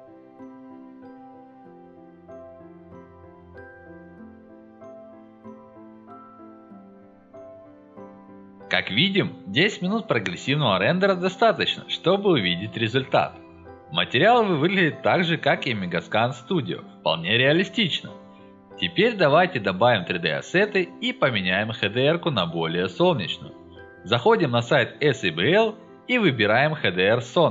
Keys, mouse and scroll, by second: 10.9 click, 11.4 click, 11.9-12.2 scroll up 1, 14.1-14.6 middle drag, 14.9 middle drag, 17.8-18.2 middle drag, 19.7 middle click, 24.2 middle click, 24.2-25.3 scroll down 4, 25.4 middle click, 25.8 middle click.